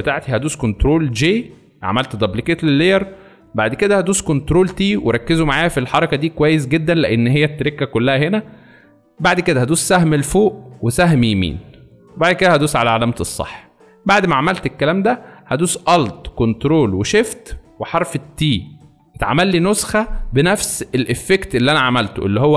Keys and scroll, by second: 0.9 ctrl+j, 4.4 ctrl+t, 9.7 Up, 10.9 Right, 18.2 ctrl+alt+shift+t.